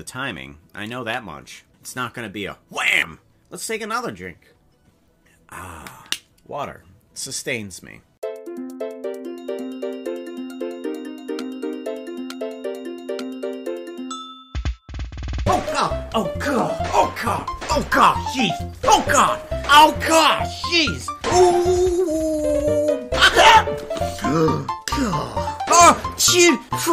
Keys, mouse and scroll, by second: 23.1 click.